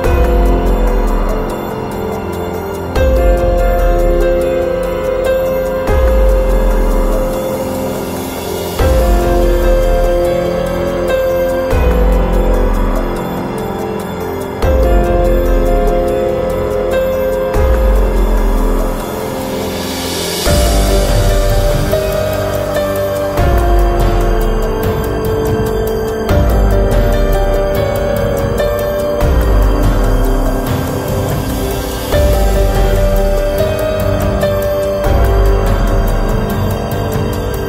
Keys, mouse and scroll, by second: 0.8 click, 1.0 click, 1.8-2.5 Left, 2.7 Left, 3.0 Left, 3.5 space, 3.8 space, 4.3 space, 8.4-9.9 middle drag, 10.1 click, 10.6 click, 11.8-13.2 drag, 15.9 middle click, 16.6-18.0 drag, 21.6-22.9 drag, 28.9-31.0 middle drag, 34.4 click, 36.7 click.